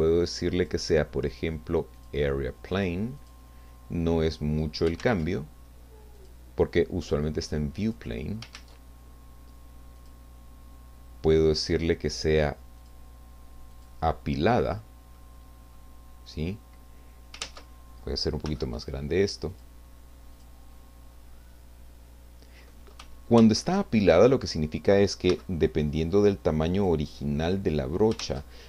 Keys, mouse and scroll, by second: 0.6 click, 2.0 click, 3.2 click, 5.0 ctrl+z, 6.1 click, 7.0 click, 7.9 click, 8.5 ctrl+z, 10.0 click, 12.8 click, 13.7 click, 15.2 middle click, 16.3-17.1 scroll up 1, 17.1-17.4 scroll down 1, 17.7 ctrl+z, 18.4 f, 19.5 click, 22.0 scroll down 2, 23.6 ctrl+z, 25.3 f, 26.8 click, 27.4 click, 28.4 ctrl+z.